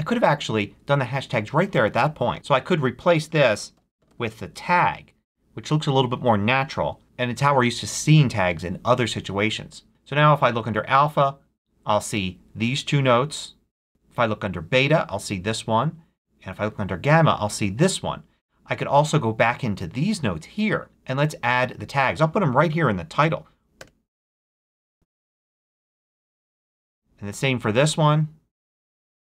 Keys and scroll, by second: 2.3 super+z, 2.9-4.6 typing, 4.6 Return, 6.3 shift+BackSpace, 6.4 shift+3, 23.8 space, 24.6 shift+3, 24.9 a, 25.0 Return.